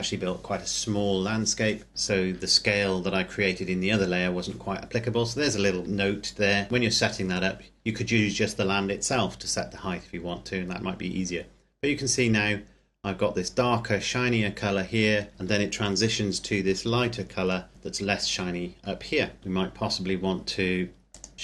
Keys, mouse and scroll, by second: 11.7-13.6 scroll up 1, 19.6 Escape, 21.1 click, 21.3 Escape.